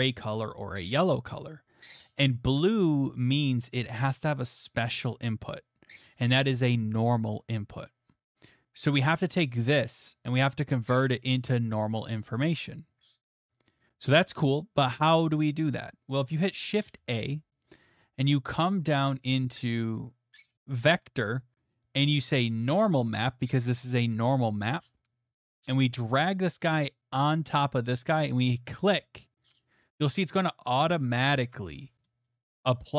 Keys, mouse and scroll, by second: 9.5-16.4 drag, 16.9 a, 24.9-29.6 drag, 31.8 middle click.